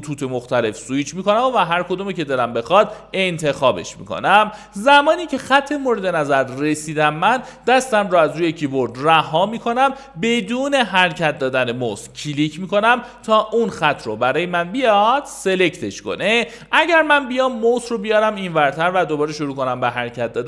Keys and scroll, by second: 0.0-2.0 typing, 16.4 Escape, 18.5-20.4 typing.